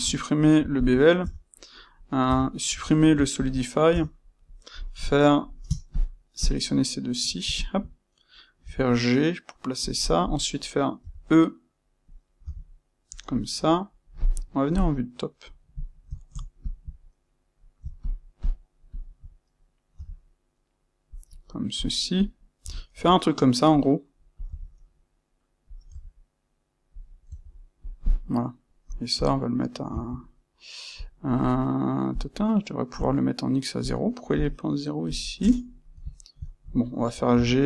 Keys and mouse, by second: 0.0 space, 1.1 Tab, 2.7 space, 3.9 Tab, 4.4 click, 5.9 shift+click, 6.3 shift+click, 7.5 shift+click, 8.5 c, 10.2 click, 11.0 e, 13.1 click, 13.3-16.5 middle drag, 14.7 KP_7, 16.5 shift+click, 18.0 shift+click, 18.3 shift+click, 18.8 shift+click, 21.1 click, 21.7 click, 22.6 e, 25.7 click, 25.8 e, 27.0 click, 27.2 e, 27.8 click, 29.1-31.0 drag, 30.0 Escape, 32.1 click, 33.7-36.0 drag, 35.3 KP_Enter, 36.0-37.6 shift+middle drag, 37.3 c.